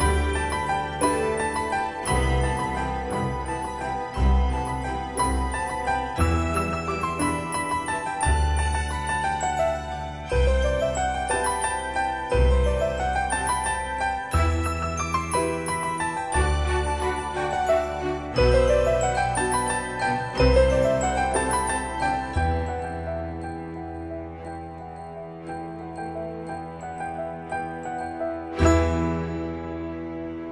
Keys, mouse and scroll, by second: 0.4 scroll up 1, 10.0 click, 14.8-15.6 scroll down 1, 17.7 click, 20.1-20.5 scroll down 1, 20.8 middle click, 22.4-22.9 typing, 24.2 click.